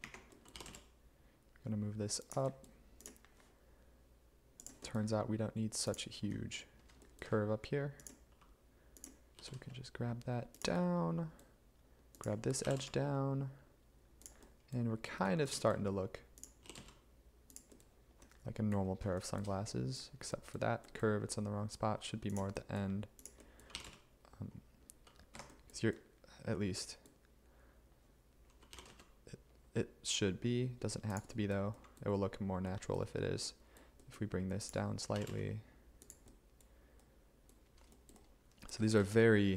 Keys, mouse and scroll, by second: 0.1 a, 9.4 g, 9.6 z, 12.7 g, 12.8 z, 16.7 g, 16.8 z, 23.8 g, 25.4 Escape, 28.8 g, 29.0 z, 35.2 g, 35.4 z.